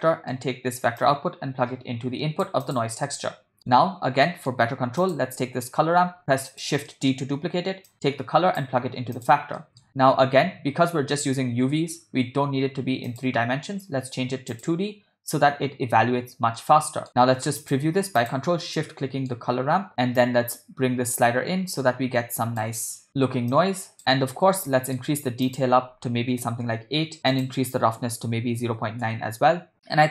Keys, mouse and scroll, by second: 0.0 middle click, 1.0-2.6 drag, 2.7 click, 3.1 middle click, 4.3 ctrl+middle click, 5.1 click, 6.0 shift+d, 6.9 middle click, 7.9 click, 9.2 click, 9.6 middle click, 13.1-14.8 drag, 16.6 middle click, 17.6 click, 18.4 ctrl+shift+click, 18.9 middle click, 20.2-22.6 drag, 23.5 click, 24.0 middle click, 24.7 ctrl+middle click, 25.5-26.7 drag, 27.3-29.1 drag.